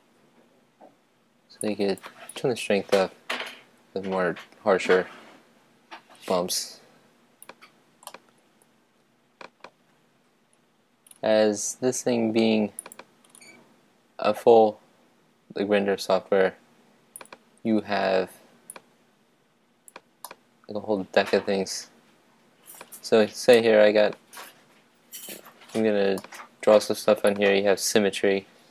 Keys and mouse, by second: 1.6-7.4 drag, 8.1-11.4 middle drag, 12.8-14.9 drag, 17.2-20.6 drag, 20.6-22.1 middle drag, 23.5-25.3 middle drag, 26.1-27.3 middle drag, 27.3-28.7 drag.